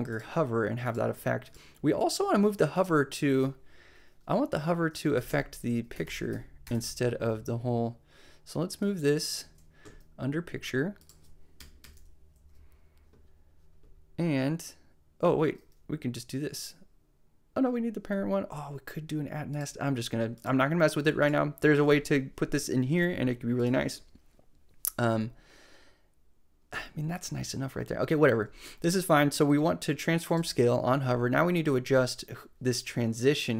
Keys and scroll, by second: 4.9-6.6 typing, 11.6 Return, 11.8 Return.